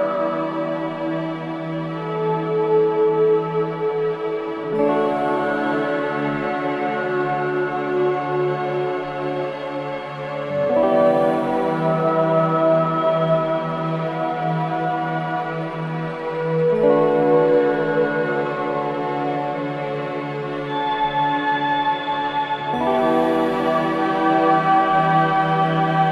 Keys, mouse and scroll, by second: 0.9 click, 1.7 alt+click, 2.5-3.2 scroll down 2, 3.8 alt+click, 3.9 alt+right click, 4.5-6.6 drag, 6.6 alt+right click, 6.7 alt+middle click, 7.5 click, 7.9 alt+right click, 8.4 alt+click, 9.3-11.0 alt+drag, 11.7 alt+right click, 11.9 alt+middle click, 12.5-14.6 alt+drag, 14.6 alt+middle click, 15.1 alt+right click, 15.5 alt+click, 16.5 ctrl+z, 18.8 click, 22.6 click, 22.7 click, 24.5 alt+click, 25.1 ctrl+z.